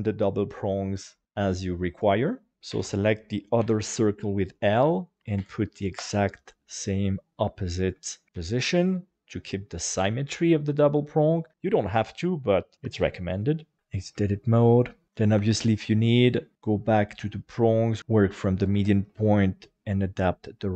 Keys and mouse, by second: 1.0 shift+middle click, 2.7 alt+a, 3.6 l, 4.9-6.0 drag, 6.8 middle click, 7.9 shift+middle click, 13.8 Tab, 14.2 shift+middle click, 14.8 middle click, 15.4 Tab, 15.7 middle click, 17.1 click, 18.7 r, 19.1 z.